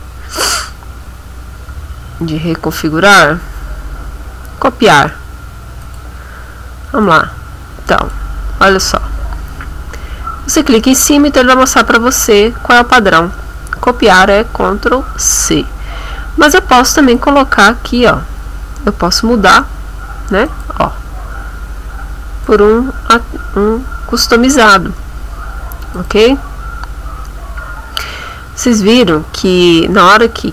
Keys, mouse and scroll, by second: 1.0 scroll down 2, 1.5-1.8 scroll down 2, 2.0-2.4 scroll down 2, 3.0-3.5 scroll down 2, 3.8 scroll down 2, 5.8 click, 7.0-8.4 drag, 17.0 click, 20.5 click, 22.4 click, 26.0 click, 29.0 click.